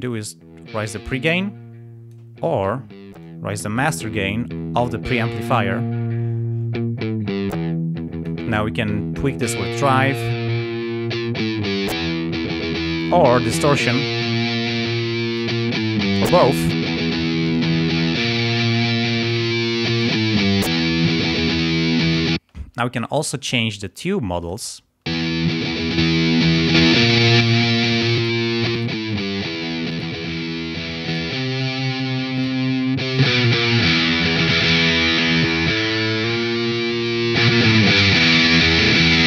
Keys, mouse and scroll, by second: 0.0-2.3 drag, 3.2-4.9 drag, 5.5-8.4 drag, 9.3-12.1 drag, 13.4-15.6 drag, 17.1-18.4 drag, 19.2 click, 22.3 space, 24.4 click, 25.1 space, 26.0 click, 26.7 click, 27.4 click, 28.1 click, 28.7 click, 29.8 click, 31.0 click, 32.3 click, 33.1 click, 35.4 click, 37.0 click, 38.7 click.